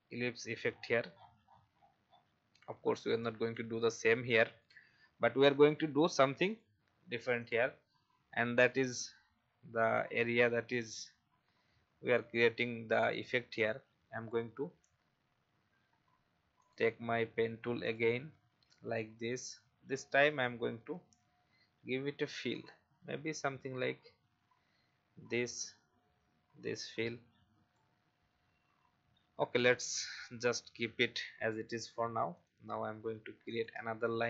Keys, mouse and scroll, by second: 0.7-2.6 scroll down 1, 3.5 click, 17.8 shift+click, 18.4 shift+v, 19.3 click, 20.9 shift+x, 22.5 click, 23.9 shift+scroll up 1, 26.9-33.4 drag.